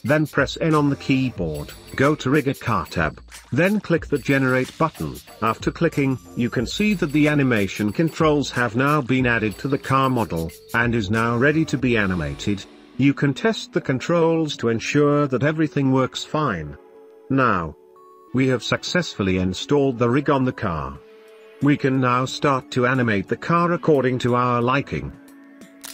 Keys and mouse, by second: 5.5 click, 7.4 middle click, 7.9-8.3 middle drag, 8.6-9.1 shift+middle drag, 9.9-11.1 middle drag, 11.1-11.8 right drag, 11.8-12.4 middle drag, 12.9-16.5 typing, 13.0 shift+middle click, 13.7 shift+middle click, 14.6 shift+click, 14.7 middle click, 15.0 click, 15.4 click, 16.1 middle click, 16.9-24.2 middle drag, 24.9-25.6 shift+middle drag.